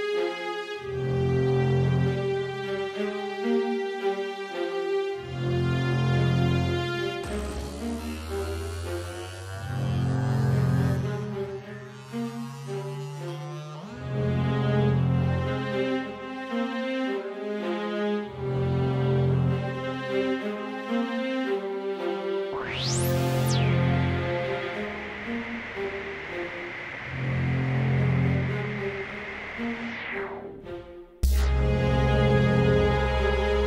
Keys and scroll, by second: 2.6 Down, 2.6 Down, 2.7 Down, 2.8 Down, 3.2 Left, 4.7 Left, 5.2 Up, 7.9 Left, 8.4 Down, 8.6 Up, 9.6 super+d, 12.2 Right, 12.3 Right, 12.3 Right, 12.5 Right, 13.0 Right, 16.7 Return, 16.7 6, 31.7 d.